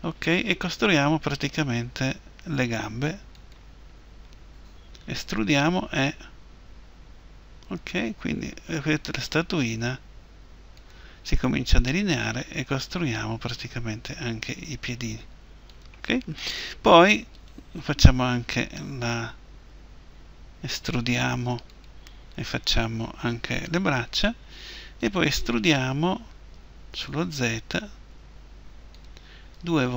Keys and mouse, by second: 3.5-5.6 drag, 5.6 e, 10.9-12.6 drag, 11.9 e, 15.8-18.4 drag, 17.3-19.0 right drag, 18.4 e, 22.0-28.9 right drag, 26.5 e, 29.0 click, 29.5 e.